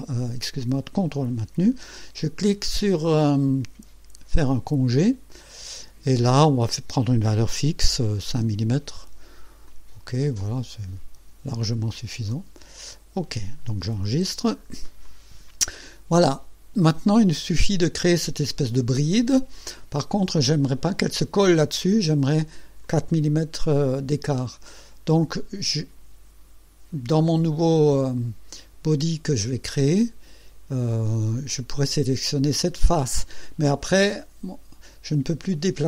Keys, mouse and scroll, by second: 4.5 click, 8.3 KP_5, 9.7 click, 11.5 click, 12.3-13.7 drag, 14.1 ctrl+s, 14.5 ctrl+scroll down 2, 15.0-16.4 drag, 20.2-21.1 drag, 21.8-22.5 drag, 22.8 click, 24.7 click.